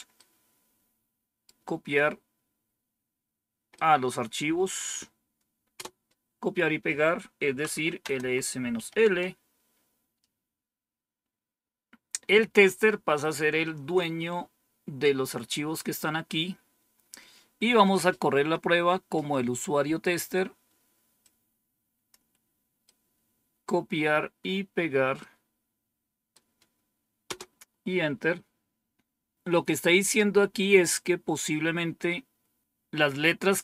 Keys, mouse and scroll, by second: 0.0-1.4 right drag, 3.6-4.8 right drag, 5.7 Return, 7.3-8.7 typing, 9.0 Return, 21.1 click, 22.7 right click, 25.1-26.2 right drag, 27.2 Return.